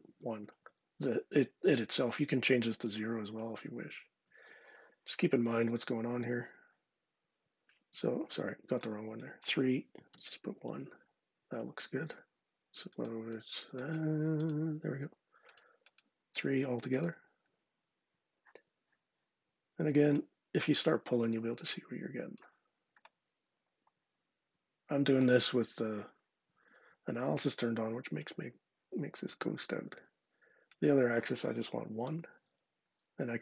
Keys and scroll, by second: 2.6 0, 9.9 1, 31.7 0.